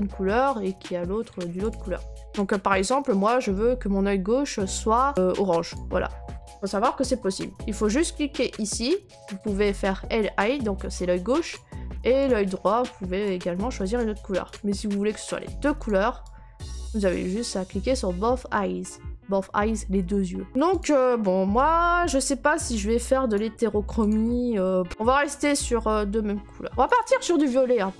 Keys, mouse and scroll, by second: 1.7 click, 5.1 click, 5.7 click, 7.4 click, 12.3 click, 14.0 click, 14.5 click, 15.2 click, 15.9 click, 16.7 click, 17.1 click, 20.5 scroll, 20.8 click, 23.3 click, 24.1 click, 24.9 click, 26.8 click, 27.4 click.